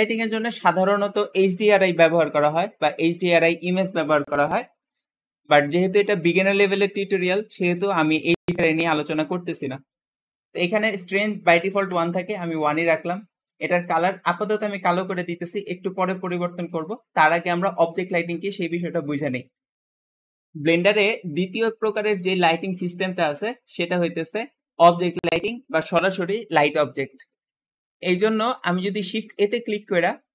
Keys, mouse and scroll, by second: 10.4-13.5 drag, 11.1 typing, 11.6 Return, 13.6 End, 28.8 shift+a, 29.0 shift+a.